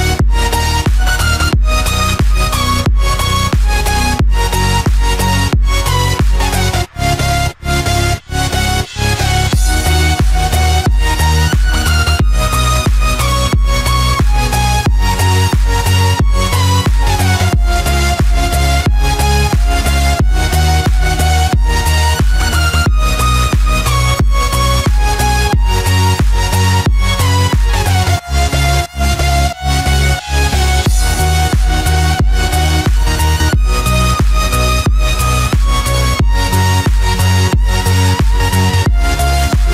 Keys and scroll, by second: 3.9 ctrl+z, 16.2 ctrl+z, 24.2 ctrl+-, 28.0 ctrl+a, 28.6 Delete, 29.3 ctrl+d.